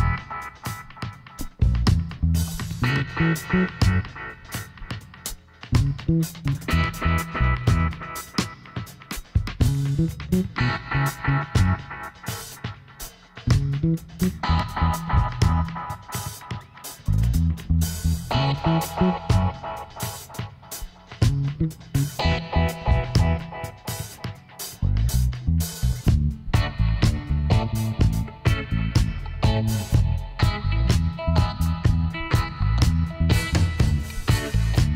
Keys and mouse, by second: 1.4 click, 1.7 Tab, 2.3 right click, 4.3 middle click, 4.8 KP_1, 5.4 middle click, 6.8-8.2 drag, 7.6 e, 12.7 ctrl+z, 13.9 f, 15.7 KP_1, 17.0 e, 21.9 z, 23.5 click, 24.0 middle click, 29.5 Tab, 30.3-31.3 right drag, 31.0 Tab, 31.3 middle click, 33.5 z, 34.1-34.9 middle drag.